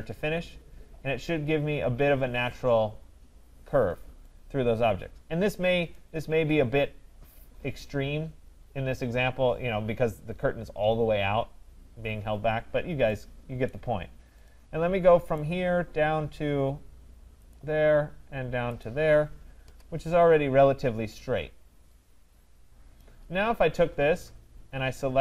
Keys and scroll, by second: 19.6 Return.